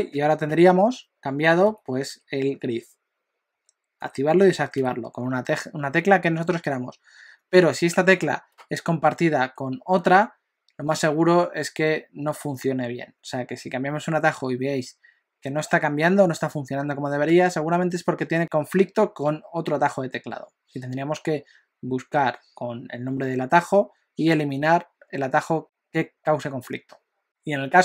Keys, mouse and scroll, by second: 0.1 u, 0.5 u, 1.7 u, 2.1 u, 3.5 u, 4.0 u, 4.4 u, 4.8 u.